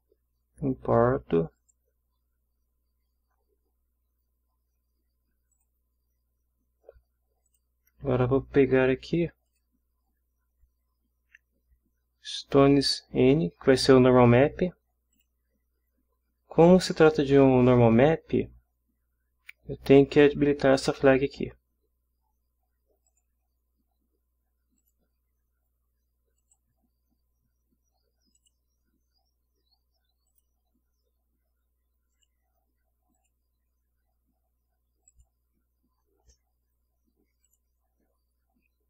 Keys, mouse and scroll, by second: 1.6 click, 5.5 click, 7.4 click, 9.5 click, 12.8 click, 15.1 click, 23.1 click, 24.8 click, 26.4 click, 28.4 click, 30.3 click, 32.1 click, 33.2 click, 35.1 click, 37.4 click.